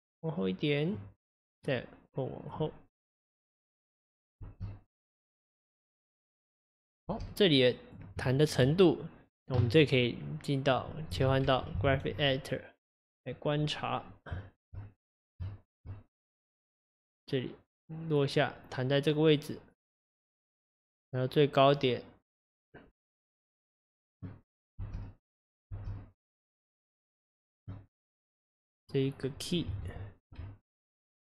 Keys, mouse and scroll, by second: 1.6 click, 4.4 space, 7.1 space, 7.3 click, 8.4 shift+middle click, 8.7-9.4 scroll up 4, 14.5 shift+middle click, 14.7-15.0 shift+scroll up 1, 15.4 scroll up 5, 15.5-16.6 shift+middle drag, 16.6 click, 24.4-24.8 scroll down 2, 24.8 space, 25.8 space, 26.3 click.